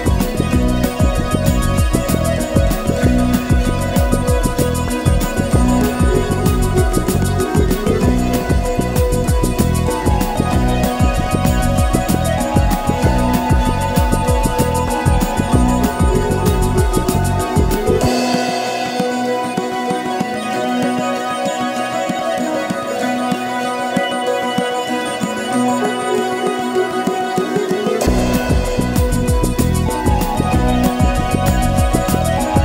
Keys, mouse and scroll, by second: 0.1 click, 0.3 shift+click, 0.4 shift+click, 0.8 shift+click, 1.1-3.0 typing, 4.0 click, 4.1-6.4 typing, 4.2 scroll down 2, 4.3 Tab, 4.4 scroll up 5, 4.5 Tab, 4.8 click, 5.1 click, 6.1 click, 6.3 click, 6.9 scroll down 1, 7.0 shift+middle drag, 7.3-7.9 scroll up 1, 7.9-10.4 typing, 7.9-8.4 scroll down 9, 8.4 scroll up 9, 9.8 scroll up 1, 9.8 middle click, 10.0 click, 11.8-25.7 typing, 12.0 scroll down 1, 12.9 click, 14.6 alt+m, 14.8 alt+click, 16.2 shift+middle drag, 16.6 click, 16.6 middle click, 16.9 middle click, 17.6 middle click, 17.8 click, 17.9 middle drag, 18.5 middle drag, 19.1 alt+m, 19.3 middle drag, 19.4 click, 19.5 middle click, 19.9 middle drag, 20.1 click, 21.9 click, 22.4 middle drag, 22.7 click, 22.8 middle click, 23.1-23.5 middle drag, 23.5 click, 24.1 click, 24.7 middle drag, 25.1 scroll down 1, 25.2 Tab, 25.3-25.7 scroll up 2, 25.8 shift+middle click, 25.9 scroll down 2, 26.6 scroll up 1, 27.1-27.5 middle drag, 27.5 Tab, 27.6-28.0 middle drag, 28.0-31.4 typing, 28.5 click, 28.5 shift+middle click, 29.0 Tab, 29.1 middle drag, 29.5-29.9 middle drag, 30.7 middle click, 31.1 middle click, 31.6 middle click, 31.8 scroll up 3, 32.0 click, 32.2 middle click, 32.3 shift+click, 32.4 middle click.